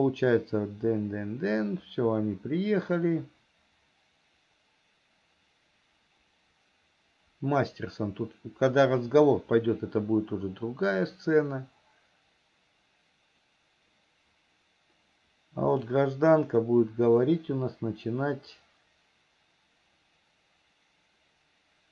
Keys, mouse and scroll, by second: 0.4-16.3 drag, 17.5-21.9 drag.